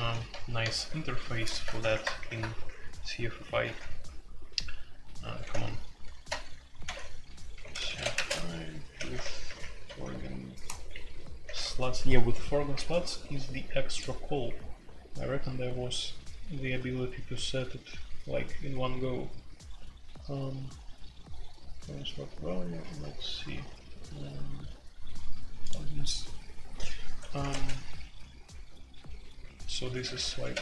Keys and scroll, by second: 0.7 super+k, 1.2 super+k, 1.8 ctrl+t, 2.1 alt+Home, 3.6 typing, 5.4 typing, 6.2 Escape, 6.8-11.4 typing, 27.4 ctrl+g, 30.0-30.6 typing.